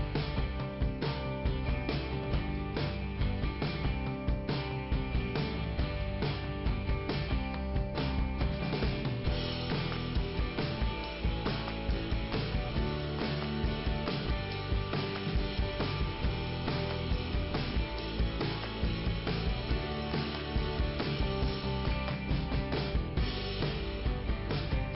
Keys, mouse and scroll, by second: 0.2 right click, 0.3 double right click, 0.7 scroll up 2, 1.1 right click, 1.8 click, 2.7 click, 3.7 click, 5.5 scroll down 2, 7.6 middle click, 8.3 scroll down 2, 9.6-10.0 scroll up 1, 11.0 scroll down 1, 12.3 scroll down 1, 12.9 scroll up 2, 14.1 click, 22.0 click, 23.3 right click, 24.4 right click.